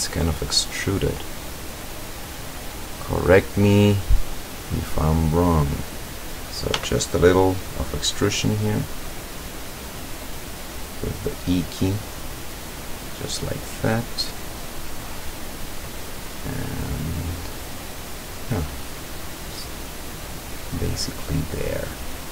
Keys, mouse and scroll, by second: 0.0-0.5 scroll up 1, 1.2-1.7 scroll up 2, 1.7-2.5 middle drag, 3.4 scroll down 1, 6.8 e, 10.7 click, 11.2-12.9 drag, 13.1 scroll down 1, 14.5 click, 15.6 click, 16.2 click, 16.6-17.8 drag, 18.0-20.4 drag, 20.8 click, 22.0-22.3 drag.